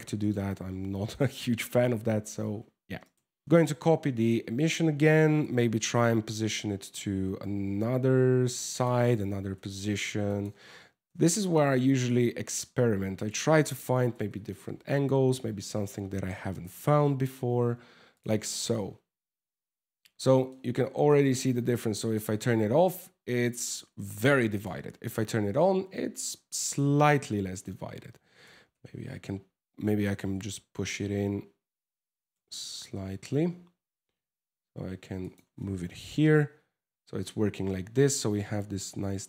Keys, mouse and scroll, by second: 0.7 middle click, 2.2 scroll down 2, 2.6 right click, 3.4 shift+d, 5.5 g, 8.9 g, 10.6 r, 13.3 g, 15.9 g, 17.9 scroll up 5, 19.1 scroll down 2, 20.1 shift+middle click, 21.6 click, 24.1 click, 25.6 scroll down 4, 25.8 middle click, 26.5 scroll down 3, 26.9 shift+middle click, 28.0 g, 28.3 x, 28.5 x, 29.6 g, 29.9 x, 30.1 x, 31.8 right click, 32.2 g, 35.6 KP_0, 36.5 scroll up 4.